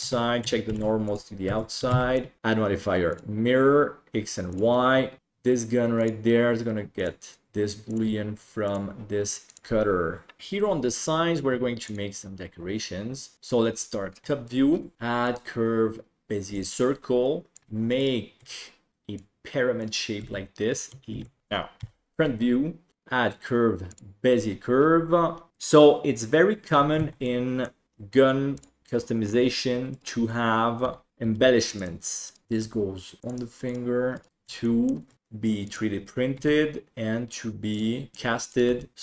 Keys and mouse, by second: 0.0 a, 0.7 alt+n, 1.5 Tab, 1.9 alt+z, 2.2 middle click, 2.4-3.2 drag, 4.5 click, 6.1-7.2 drag, 8.0 click, 14.2 KP_7, 14.9-16.6 drag, 17.6 Tab, 17.9 right click, 18.3 s, 19.3 click, 20.2 Tab, 21.7 KP_1, 22.9-24.0 drag, 25.5 Tab, 25.5 right click, 26.9 a, 27.2 middle click, 29.9 right click, 30.8 g, 31.2 g, 32.2 right click, 32.6 g, 33.7 right click, 34.1 right click, 34.7 shift+middle click, 35.1 shift+d, 36.3 e, 38.1 g, 38.7 g.